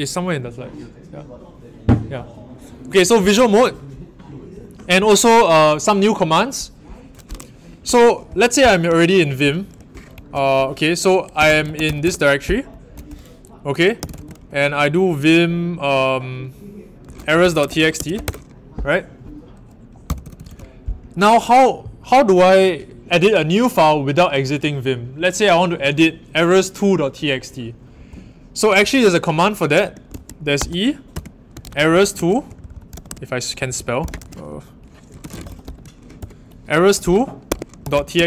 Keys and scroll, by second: 10.1 ctrl+alt+Right, 11.1-12.3 typing, 13.7-14.5 typing, 16.8-18.6 typing, 20.0-20.4 typing, 30.0-36.1 typing, 37.2-38.2 typing.